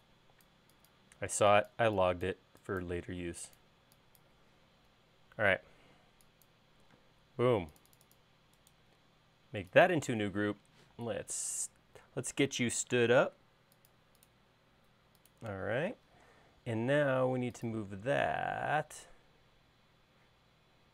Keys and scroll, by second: 5.5 space, 6.8 e, 7.8 space, 11.7 q, 14.1 Tab, 16.7 m.